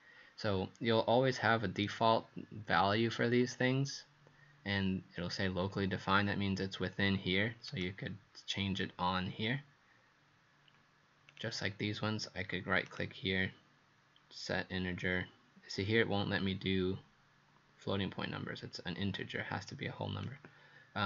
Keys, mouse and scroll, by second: 11.3 click, 12.9 right click, 19.7 click.